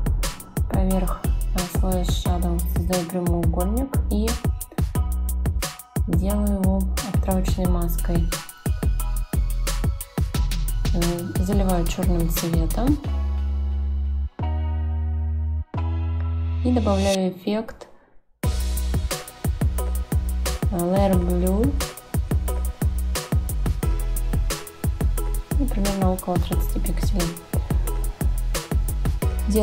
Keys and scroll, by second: 9.2 shift+Down.